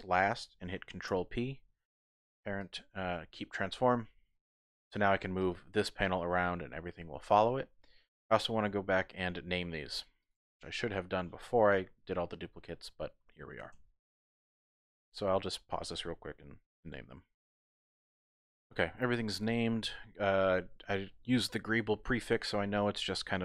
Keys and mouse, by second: 1.7 ctrl+p, 4.0 middle click, 4.9 click, 5.4 click, 6.4-7.3 typing, 7.3 click, 7.6 click, 13.7 KP_1, 15.1 shift+click, 18.0 ctrl+..